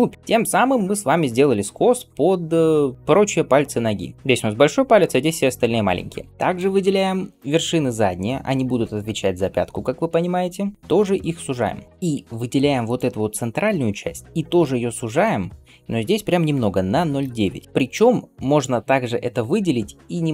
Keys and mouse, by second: 0.1-6.0 right drag, 6.3-20.3 shift+drag, 11.1 s, 14.5 s, 18.9 g.